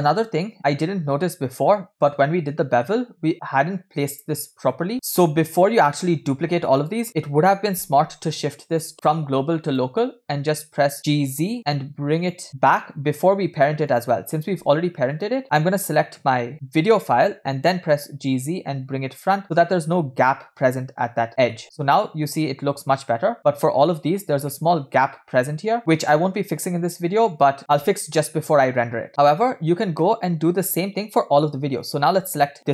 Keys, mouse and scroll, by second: 0.9 scroll up 2, 1.7 scroll down 1, 2.2-2.9 shift+middle drag, 2.2 shift+scroll down 1, 4.8 scroll down 1, 8.7-10.3 drag, 10.9 g, 13.9 drag, 15.2 click, 17.7 g, 20.4 scroll up 2, 21.0 scroll down 2, 21.3 scroll up 1, 21.6 shift+middle drag, 23.4-23.9 shift+middle drag, 24.0 scroll up 2, 24.5-25.1 shift+middle drag, 26.2 scroll down 2, 26.8 scroll up 1, 27.6-28.2 shift+middle drag, 29.3 scroll up 1, 30.1 shift+middle click, 31.8 click.